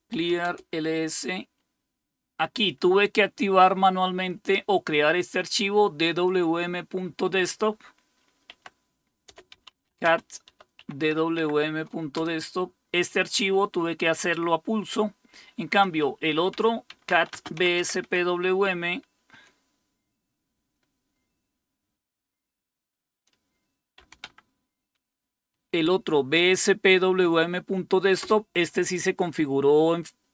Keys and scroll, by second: 0.0-0.8 typing, 8.5-10.8 typing, 12.1 typing, 16.3-18.5 typing, 24.0 typing, 24.2 Tab, 28.2 Return.